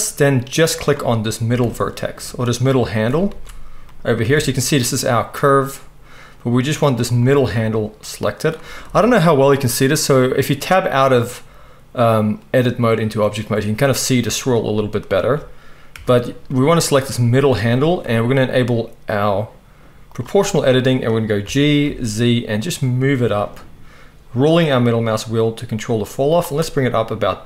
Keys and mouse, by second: 0.9-2.4 right drag, 1.5 z, 2.4-7.2 middle drag, 3.3 ctrl+z, 4.2 a, 7.2 click, 7.2-16.4 right drag, 8.8 Tab, 15.9 Tab, 16.4-17.6 drag, 17.6-27.4 right drag, 20.1 click, 21.4 g.